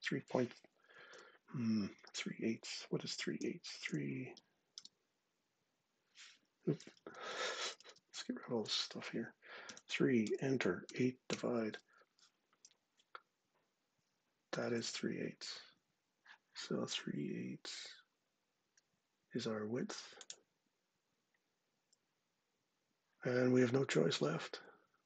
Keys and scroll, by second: 0.8 super+Tab, 3.2 3, 3.7 Return, 4.2 /, 4.6 8, 6.8-8.4 typing, 7.1 Delete, 7.7 Delete, 9.5 3, 10.0 Return, 10.7-11.1 typing, 14.4 super+Tab.